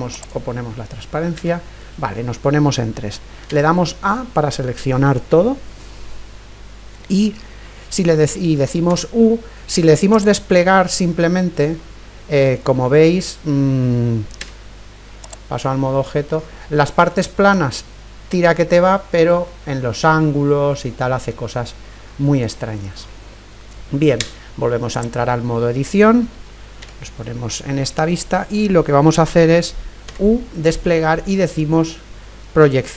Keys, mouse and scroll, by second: 1.4 KP_3, 3.5 a, 8.9 u, 11.8-15.6 middle drag, 13.6 scroll up 1, 14.4 Tab, 15.8-19.4 middle drag, 19.5-24.4 middle drag, 24.2 Tab, 26.8 KP_3, 30.1 u.